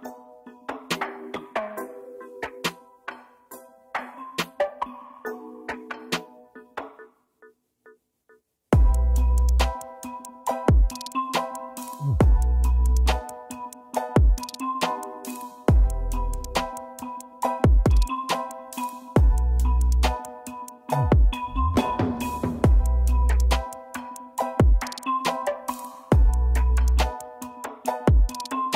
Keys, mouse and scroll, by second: 0.1 scroll down 1, 2.5 click, 2.6 click, 3.6 double click, 4.6-5.5 typing, 5.6 ctrl+space, 6.7 double click, 13.6 ctrl+click, 16.4-17.4 typing, 20.2 ctrl+space, 21.0 Right, 27.9 shift+right click, 28.5-28.7 scroll up 1.